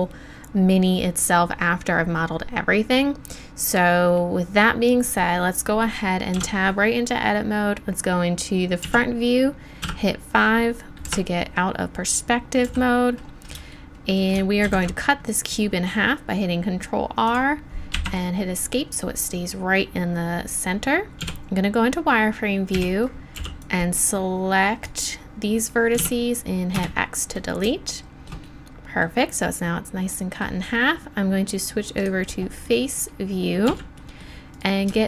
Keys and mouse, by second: 6.3 Tab, 8.8 KP_1, 10.5 KP_5, 11.0 ,, 12.6 n, 14.6 ctrl+r, 21.2 z, 22.7 a, 23.3 b, 26.0 x, 32.0-33.7 drag, 33.7 z.